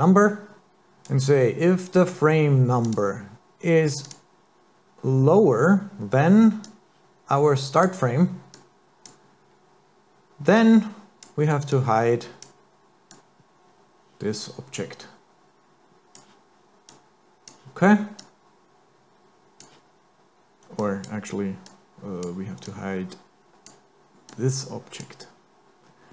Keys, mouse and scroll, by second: 2.9 click, 6.6 click, 8.5 click, 10.6 click, 11.7 click, 13.1 click, 16.9 click, 18.2 click, 20.8 click, 21.7 click, 22.7 click, 24.3 click.